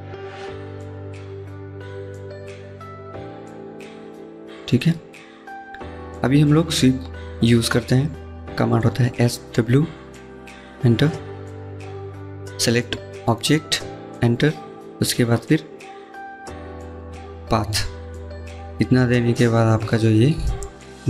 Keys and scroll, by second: 8.8-9.8 typing.